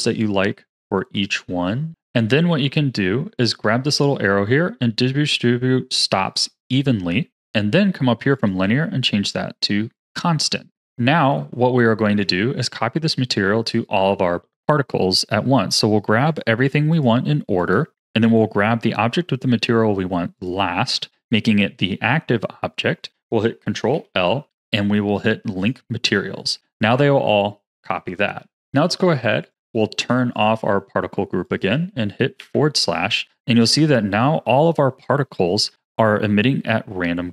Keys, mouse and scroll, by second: 0.7 click, 1.9 click, 3.8-6.9 drag, 8.3-10.7 drag, 10.7-14.4 middle drag, 15.1 click, 16.9 shift+click, 17.5 shift+click, 20.3 shift+click, 23.9 ctrl+l, 26.5 a, 29.4 click, 30.3 click, 31.0-31.4 scroll down 3, 31.4 click, 32.4 KP_Divide, 33.2-33.8 scroll down 5, 33.8-34.4 scroll down 3, 34.4-37.3 middle drag.